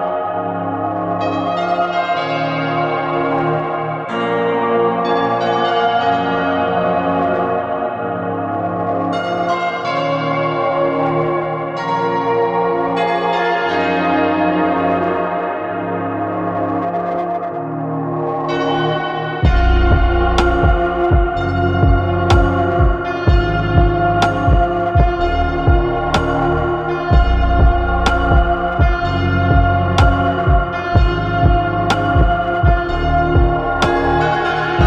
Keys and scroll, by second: 14.9 7, 18.6 2, 22.2 Escape, 23.8 shift+Caps_Lock, 34.4 ctrl+c.